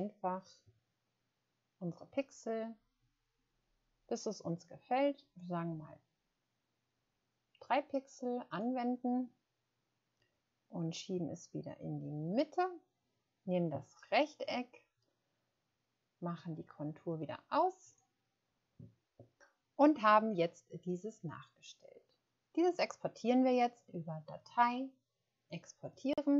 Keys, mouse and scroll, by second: 0.0 scroll down 1, 0.6 scroll down 1, 0.6 scroll up 1, 1.2 scroll up 1, 2.8 scroll down 1, 3.5-3.8 scroll up 1, 4.4-4.9 scroll down 1, 6.9-7.2 scroll up 1, 7.9 scroll up 1.